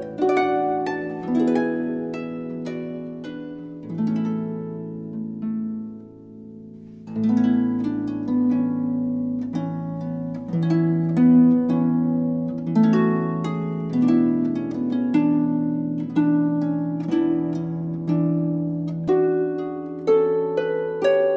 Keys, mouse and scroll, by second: 0.4-2.4 right drag, 0.4 z, 2.4 r, 4.8 right click, 5.6-6.3 right drag, 7.9-8.8 right drag, 7.9 r, 10.2 right click, 11.1-11.7 right drag, 11.1 r, 13.8 KP_1, 14.0 z, 16.5 a, 16.8 a, 18.6-21.3 drag.